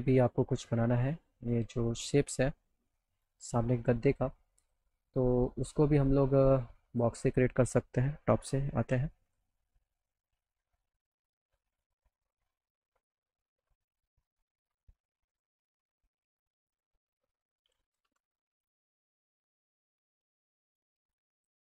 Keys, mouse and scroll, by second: 0.3 click, 3.0 middle click, 3.0 scroll down 1, 4.7 click, 6.9 click, 9.5 middle click, 9.8 middle click, 10.3 middle click, 11.9 click, 14.3-15.7 drag, 16.2 click, 16.4 right click, 16.7 middle click, 17.0 middle click, 18.2 z, 18.4 alt+middle click, 19.2 middle click, 20.2-21.4 drag.